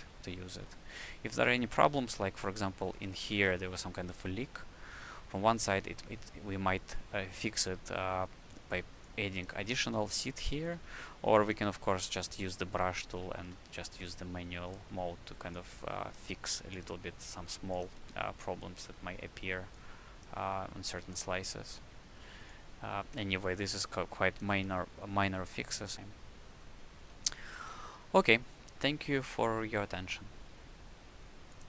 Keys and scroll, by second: 3.0 w, 4.2 d, 5.6 d, 10.7 c, 13.5 s, 16.2 s, 18.0 s, 23.2 s, 25.9 s, 27.7 q.